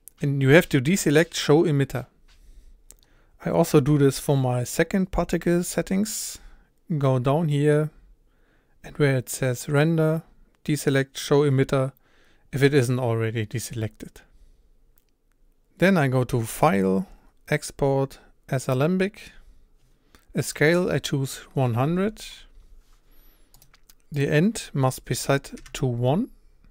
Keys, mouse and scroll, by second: 19.4-25.9 drag.